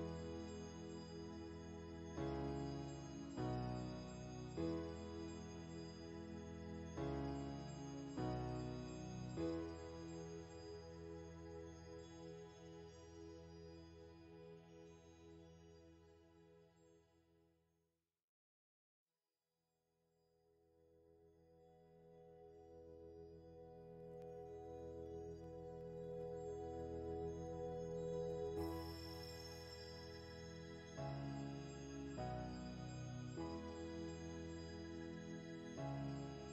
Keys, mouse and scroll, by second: 1.2 click, 2.1-3.7 middle drag, 3.7 f, 4.9-6.7 drag, 6.7-7.9 middle drag, 7.9 space, 8.3 f, 9.0-12.9 shift+drag, 12.9 f, 13.7-18.6 ctrl+drag, 18.6 f, 19.2 middle click, 19.8 click, 20.8 middle click, 21.2-22.2 shift+drag, 22.2 shift+middle click, 22.8-24.3 shift+drag, 24.3 middle click, 24.8-26.2 shift+drag, 26.2 middle click, 26.6 shift+click, 27.3 middle click, 27.7 shift+click, 28.4 middle click, 28.8-30.8 shift+drag, 30.8-33.1 middle drag, 33.1-34.7 drag, 34.7 middle click, 35.2-36.5 drag.